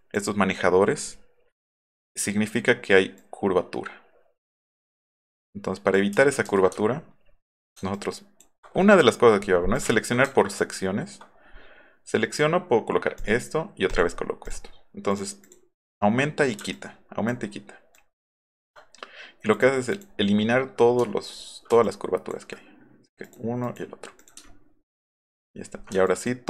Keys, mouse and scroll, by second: 3.2-4.6 ctrl+drag, 5.4-5.9 ctrl+drag, 6.1 ctrl+z, 6.5 ctrl+z, 6.7 alt+scroll up 2, 7.9 ctrl+click, 9.8 click, 10.3 ctrl+click, 13.2 click, 13.9 click, 14.5 click, 15.1 click, 15.5 click, 16.7 shift+click, 17.9 ctrl+click, 19.5 click, 19.9 click, 21.1 alt+middle click, 21.3 alt+middle click, 21.8 ctrl+click, 23.2 click, 24.4 alt+middle click, 26.1 ctrl+click.